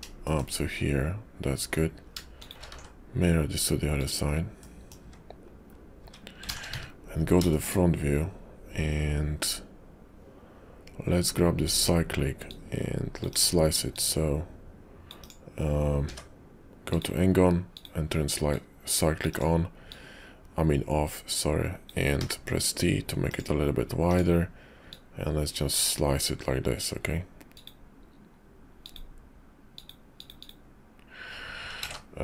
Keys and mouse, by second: 0.2 shift+middle click, 2.4 shift+click, 2.7 alt+x, 4.6 middle click, 6.6 `, 11.6 click, 12.4 click, 13.9-15.1 drag, 16.0 d, 17.7 click, 18.5 click, 19.9-21.9 drag, 24.9 click, 31.8 ctrl+z.